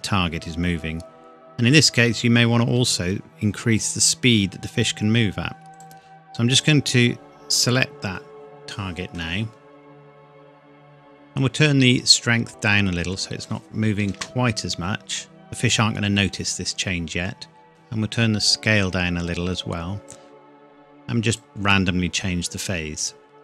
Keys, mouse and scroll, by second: 5.7 click, 11.4 click, 14.1 space, 17.7 click.